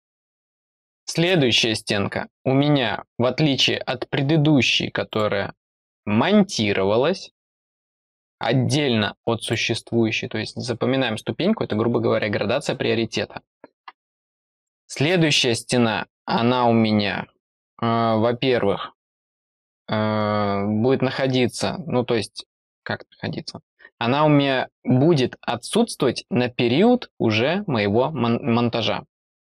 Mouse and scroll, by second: 5.0 click, 9.3 click, 14.5 click.